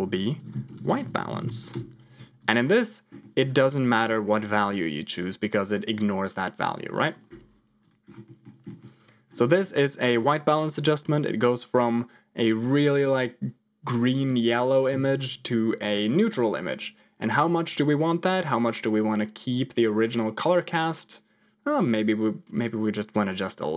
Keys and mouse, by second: 2.3 click, 3.2 middle click, 3.9 middle click, 4.5-7.2 drag, 7.7 click, 8.3 middle click, 8.7 middle click, 10.0 click, 10.7 m, 14.8 m, 18.2-23.3 drag.